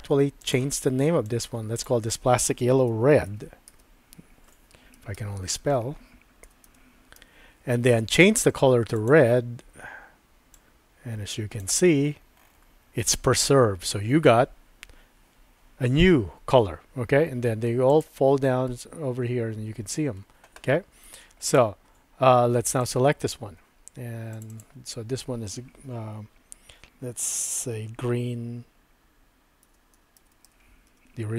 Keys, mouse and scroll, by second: 5.1 BackSpace, 17.9-21.6 drag, 23.0 click, 24.4 click, 24.5-31.3 drag, 30.3 e.